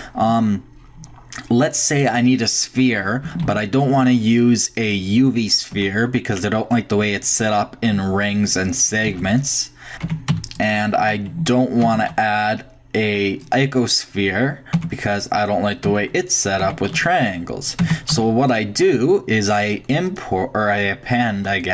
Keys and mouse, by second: 3.4 shift+a, 5.4 drag, 5.7 Tab, 9.1 x, 9.9 ctrl+z, 10.0 Tab, 10.3 x, 11.9 shift+a, 14.7 Tab, 15.9 Tab, 16.6 Tab, 16.9 x, 17.8 Tab, 18.1 x, 20.1-21.2 drag.